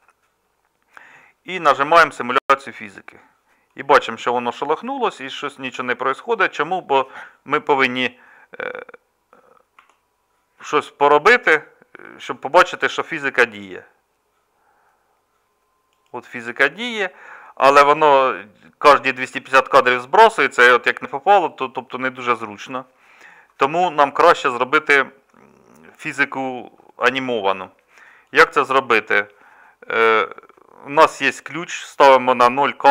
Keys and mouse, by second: 3.4 middle click, 9.7 g.